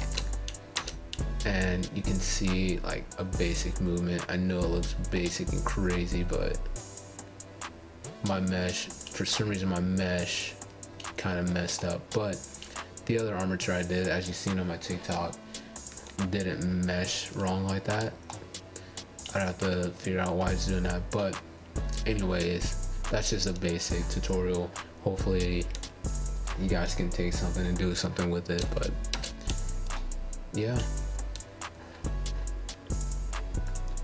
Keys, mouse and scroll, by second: 0.2 space, 5.7-8.7 middle drag, 11.2 scroll down 2, 11.4-11.8 scroll up 3, 11.8-12.2 shift+middle drag, 12.2 shift+scroll down 1, 12.8 scroll up 1, 12.8-15.7 middle drag, 19.8-23.2 shift+middle drag, 30.6 scroll down 2, 30.7-31.4 scroll up 4, 31.4-34.0 shift+middle drag.